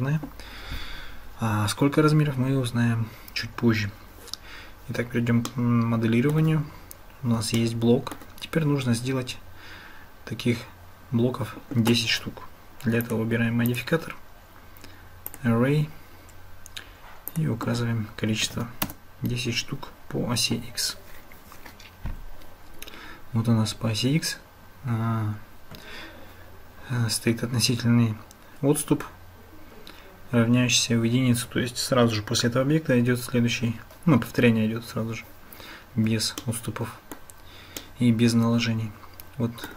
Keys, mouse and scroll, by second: 5.5-6.4 shift+middle drag, 7.6-8.2 shift+middle drag, 13.0 click, 13.7-15.4 drag, 17.3-19.5 drag, 36.4-37.2 shift+drag, 37.8-39.7 shift+drag.